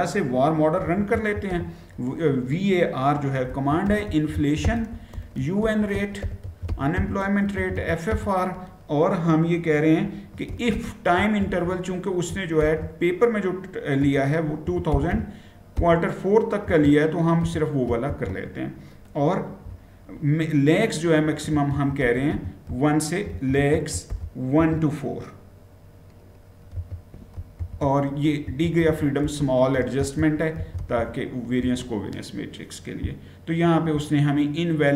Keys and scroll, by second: 0.6-1.3 typing, 2.9-7.9 typing, 10.1-12.4 typing, 13.8-17.8 typing, 19.4 typing, 21.0-24.3 typing, 26.2-31.3 typing, 31.4 Return.